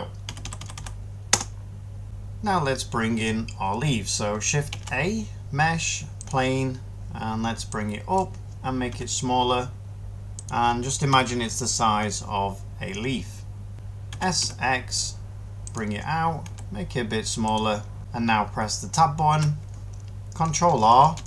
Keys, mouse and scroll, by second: 0.0-2.0 typing, 4.6 a, 8.8 s, 11.0 7, 13.7 y, 14.0 s, 14.3 x, 16.3 s, 19.2 Tab, 21.1 ctrl+r.